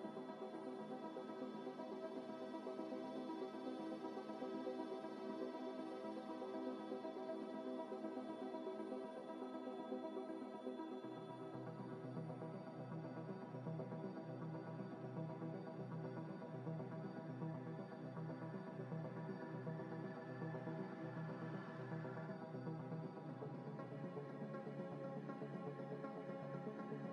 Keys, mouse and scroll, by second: 0.0-1.0 typing, 1.2 Return, 1.4 Return, 1.5 Return, 4.4 z, 5.0 click, 5.0 double click, 5.7 z, 10.2 shift+click, 10.9 ctrl+z, 12.7 shift+click, 13.8 ctrl+p, 15.6 double click, 15.8 g, 16.4 ctrl+z, 17.0 scroll up 1, 19.4 scroll down 1, 19.5 scroll up 1, 19.6 middle click, 20.2 middle click, 20.6-22.6 typing, 22.6-23.1 scroll up 1, 25.1 scroll down 1, 25.5 shift+s, 26.0 Escape, 26.2 shift+a.